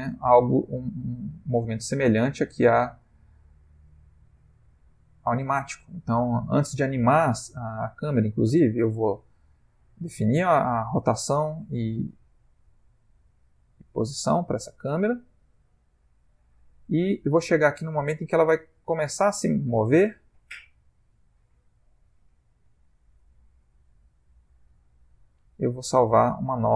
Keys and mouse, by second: 4.5 Escape, 5.2 click, 8.7 i, 14.9 click, 23.6 Left, 24.0 Right, 24.3 Right, 24.8 Left.